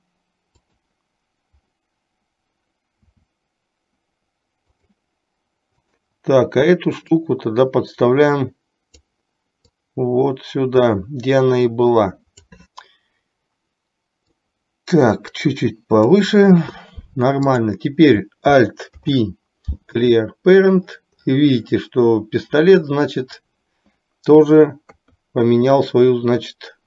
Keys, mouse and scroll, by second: 3.1 s, 5.9 click, 7.3-9.2 drag, 9.9-12.6 drag, 14.7-16.4 drag, 17.7 click, 18.9 alt+p, 24.9 KP_3.